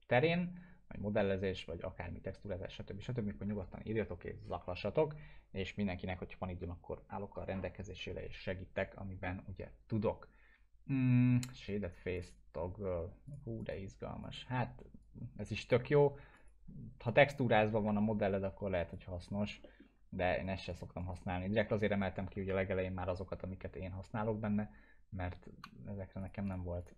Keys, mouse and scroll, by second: 12.2 click, 16.2 ctrl+z, 16.4 click, 17.6 ctrl+z, 18.0-18.6 alt+middle click, 18.8 click, 19.7 alt+middle click, 20.5 click, 22.4 ctrl+z, 26.2 click.